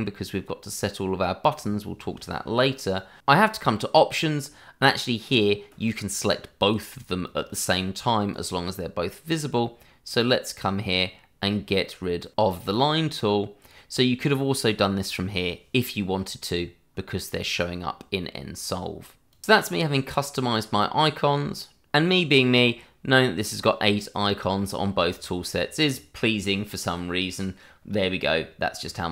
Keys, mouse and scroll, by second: 5.8 click, 12.7 click, 15.7 click, 28.0 middle click.